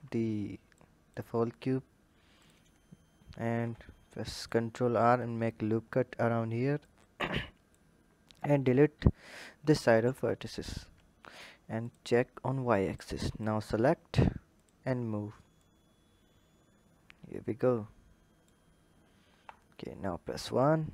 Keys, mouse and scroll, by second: 0.7 click, 2.3 click, 3.3 ctrl+r, 6.7 click, 10.0 Delete, 11.8 click, 13.0 click, 14.5-15.7 drag, 19.2 KP_1, 20.6-20.9 scroll up 2.